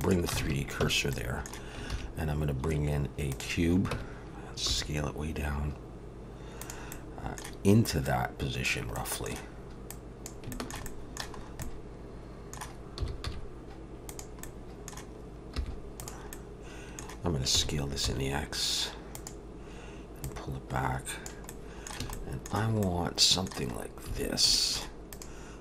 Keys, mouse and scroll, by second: 0.4 alt+a, 0.8 Tab, 1.1 middle click, 1.9 shift+a, 3.9 Tab, 4.7 s, 6.9 middle click, 8.0 click, 8.9 middle click, 9.9 click, 10.5 shift+middle click, 10.9 middle click, 11.4 scroll up 2, 11.6 middle click, 13.0 s, 14.4 middle click, 15.5 3, 16.0 click, 16.3 middle click, 17.5 s, 20.2 click, 21.5 middle click, 22.0 a, 22.1 middle click, 22.8 middle click, 23.7-24.0 scroll up 2, 24.1 alt+a, 24.5 shift+middle click, 25.1 click.